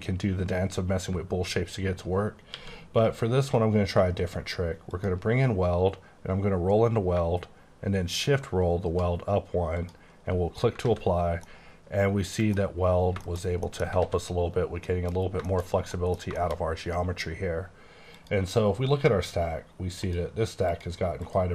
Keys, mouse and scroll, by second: 2.6 q, 5.0 click, 5.8-6.2 scroll up 1, 7.1-7.7 shift+scroll up 1, 7.9-8.6 shift+scroll up 1, 9.2 scroll up 1, 9.8 click, 10.2-10.8 scroll down 1, 10.9 alt+a, 11.1 scroll down 1, 11.5 middle click, 12.6-13.7 scroll down 7, 13.3 shift+middle click, 13.7 middle click, 14.2 a, 14.8 middle click, 15.3-16.0 scroll down 4, 15.5 shift+middle click, 16.0 middle click, 16.4 middle click, 18.1 click, 18.9-20.0 scroll down 10, 20.0 click, 20.8 click, 21.3 click.